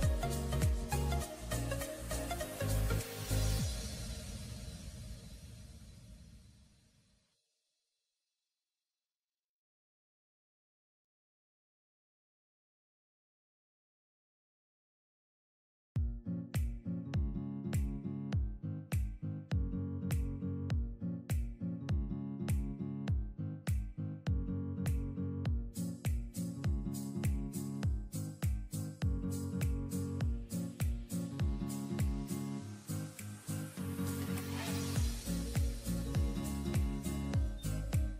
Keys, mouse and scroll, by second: 0.0 alt+scroll down 1, 3.2-3.6 alt+scroll up 1, 3.7-4.2 alt+scroll up 3, 10.5 alt+click, 12.1 alt+scroll down 1, 12.7-14.0 scroll up 1, 16.2-16.6 typing, 22.8-23.1 scroll down 1, 23.5 typing, 33.0 shift+click, 33.7 shift+click, 34.5 ctrl+click, 37.6 right click.